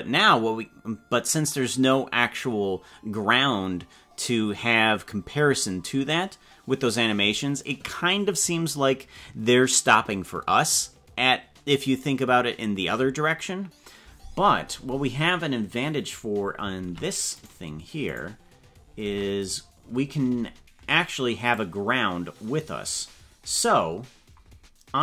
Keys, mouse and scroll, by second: 17.4 right click, 18.2 right click, 19.0 ctrl+Tab, 19.4 right click, 21.5-22.9 drag, 23.1-24.3 scroll down 9.